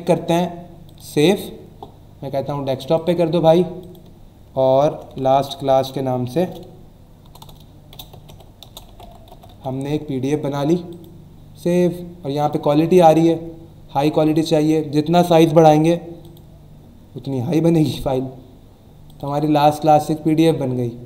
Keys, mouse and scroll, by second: 0.8 click, 2.9 click, 3.8 click, 4.9-7.2 typing, 8.3-10.0 typing, 10.9 click, 12.4 click, 14.2 click, 16.2 click, 17.8 click, 19.1 click.